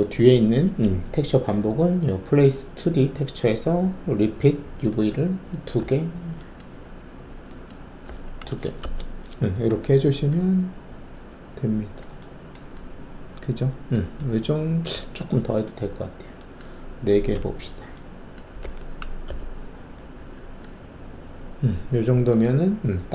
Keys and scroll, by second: 5.7 2, 8.8 Return, 17.3 4, 18.6 4, 19.2 Return.